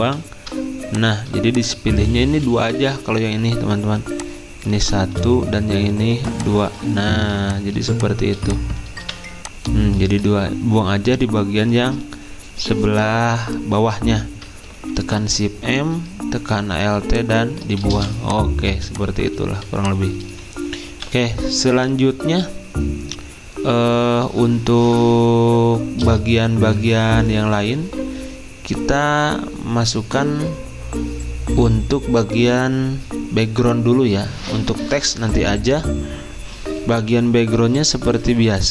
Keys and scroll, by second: 0.0 v, 2.7 Escape, 4.7 ctrl+z, 7.2 z, 9.0 v, 10.1 ctrl+z, 15.0 m, 20.7-21.4 typing.